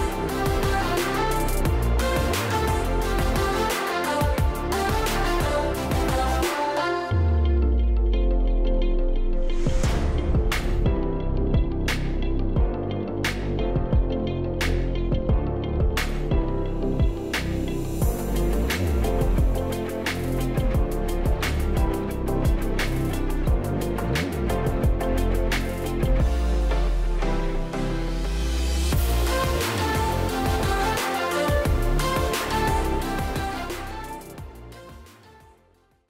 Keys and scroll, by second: 14.3 space, 15.6-16.2 ctrl+space, 21.7 ctrl+0, 26.3 ctrl+0.